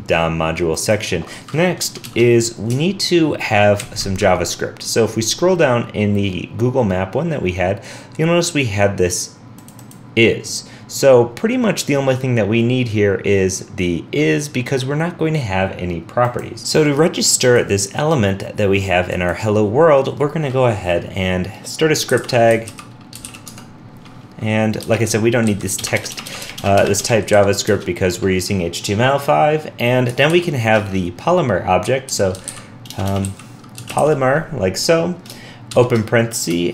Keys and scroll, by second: 3.8 alt+super+Right.